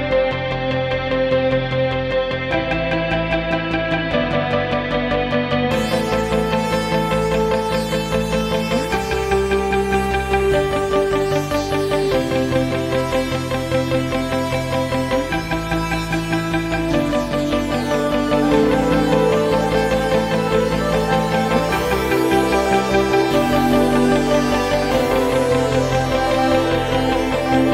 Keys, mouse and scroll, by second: 2.1 s, 5.9-7.8 middle drag, 7.8 click, 9.3 g, 15.3 click, 17.3 click, 22.6-25.1 middle drag, 25.1 click, 27.3 click.